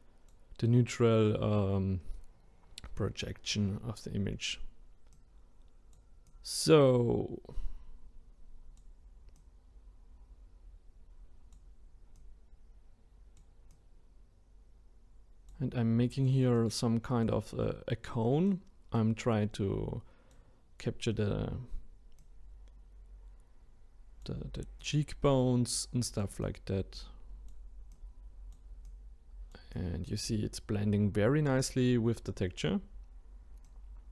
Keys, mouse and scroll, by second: 33.6-34.1 drag.